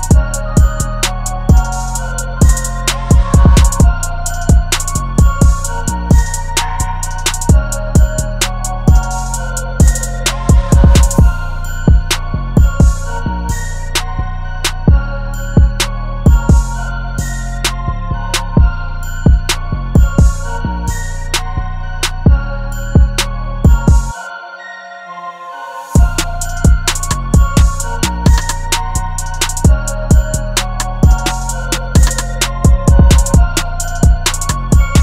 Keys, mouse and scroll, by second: 1.1 double click, 16.0-17.9 typing, 26.8-27.8 scroll up 1, 27.8 typing, 29.3 typing, 31.3 typing.